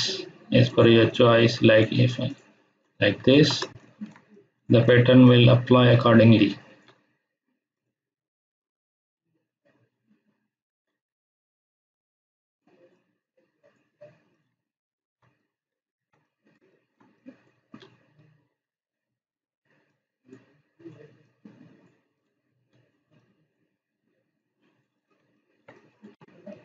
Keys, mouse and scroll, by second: 3.3 ctrl+z, 3.6 space, 3.8 ctrl+click, 4.3-4.9 click, 5.2-7.1 ctrl+drag, 9.8-10.2 scroll up 1, 10.2-11.1 scroll down 1, 11.1 scroll down 1, 12.4-13.8 drag, 14.5 space, 14.6-15.2 ctrl+click, 15.8 ctrl+click, 17.1 click, 19.8-20.5 drag, 20.5 click, 21.5-22.5 click, 23.4 click, 24.6-25.2 click, 25.2 space, 25.7 click.